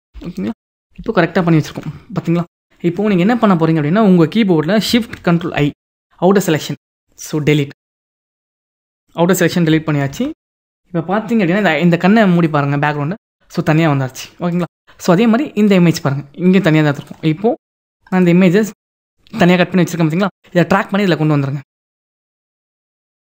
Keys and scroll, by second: 1.1 ctrl+0, 5.3 ctrl+shift+i, 9.8 ctrl+d.